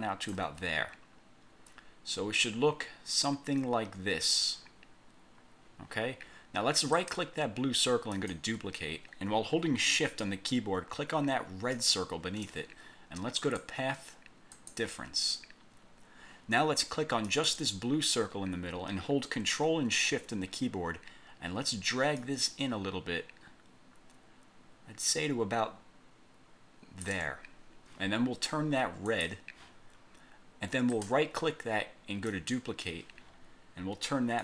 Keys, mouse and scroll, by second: 7.1 right click, 8.3 click, 11.9 shift+click, 13.6 click, 14.7 click, 17.4 click, 22.3-27.4 ctrl+shift+drag, 29.2 click, 31.0 right click, 32.4 click.